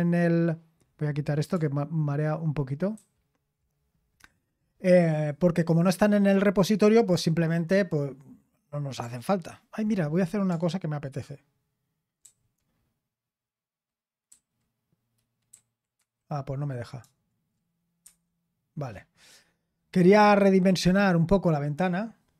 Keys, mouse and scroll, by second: 2.9 super+m, 12.2 super+r, 14.3 h, 15.5 Left, 16.0 Left, 18.1 Escape.